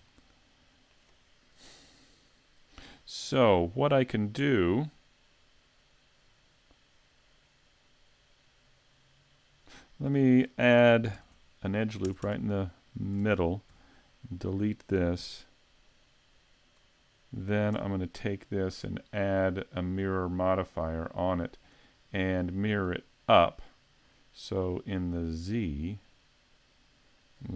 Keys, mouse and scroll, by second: 0.1 middle click, 4.5 Tab, 11.2 ctrl+r, 13.2 ctrl+Tab, 14.5 right click, 15.2 x, 17.8 Tab, 19.8 click, 21.4 click, 25.1 click, 25.8 click.